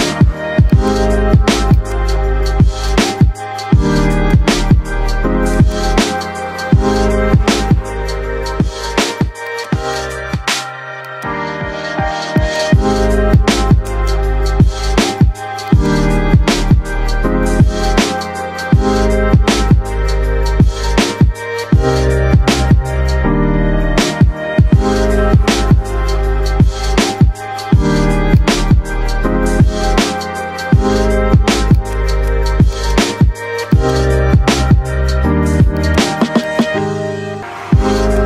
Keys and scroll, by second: 3.1 F3, 3.5 Escape, 4.7 shift+F2, 5.1 Escape, 30.7 F3, 34.3 Delete.